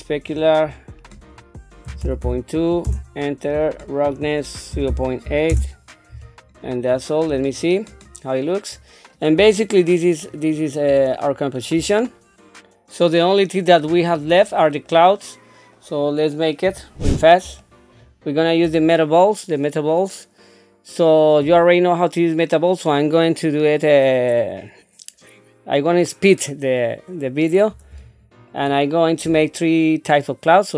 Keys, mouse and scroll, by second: 0.1 click, 1.1-2.9 drag, 4.1-5.5 drag, 6.8 click, 7.3 scroll down 1, 7.7 middle click, 8.7 scroll up 2, 9.6-10.7 shift+middle drag, 11.1 middle click, 12.0 shift+middle click, 14.9 middle click, 16.6 KP_1, 17.6-18.6 shift+middle drag, 28.5 shift+middle click.